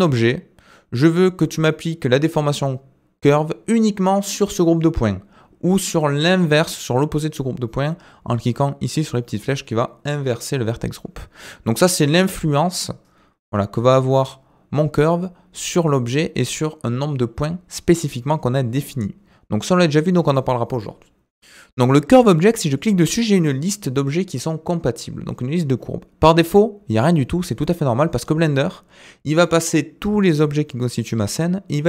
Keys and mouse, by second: 22.7-31.8 drag.